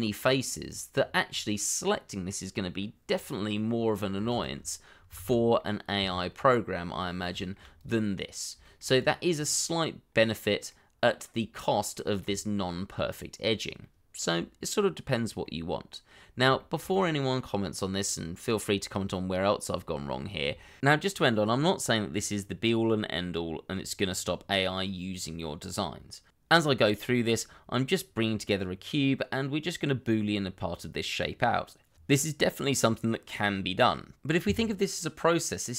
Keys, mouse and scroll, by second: 0.9-1.4 scroll down 1, 1.5 middle click, 3.1-3.4 scroll down 1, 3.5 middle click, 4.3 shift+z, 4.9 scroll down 1, 5.1 shift+z, 5.5 middle click, 5.9 Tab, 7.1 scroll down 1, 7.4 shift+middle click, 8.6 shift+middle click, 9.2 scroll up 1, 10.6 middle click, 11.9 shift+middle click, 13.4-13.8 scroll down 1, 13.8 middle click, 15.0-15.4 scroll down 1, 15.4 middle click, 16.3 scroll down 1, 16.5 shift+middle click, 17.2 middle click, 20.6 shift+middle click, 22.5 scroll up 1, 22.7 middle click, 23.7 scroll down 1, 23.8 middle click, 24.1 shift+right click, 24.6 middle click, 25.2 shift+middle click, 25.6 shift+a, 27.0 middle click, 27.5 shift+middle click, 27.7 scroll up 1, 28.0 middle click, 28.7 s, 29.0 y, 31.1 middle click, 31.7 g, 31.9 y, 32.7 middle click, 33.3 s, 33.5 x, 35.3 middle click.